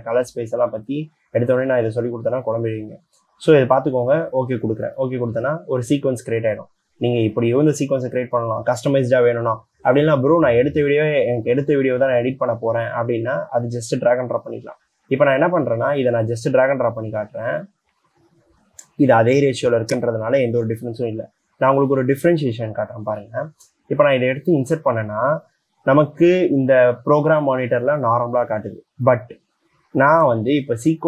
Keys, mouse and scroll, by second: 20.9 c, 30.4 c.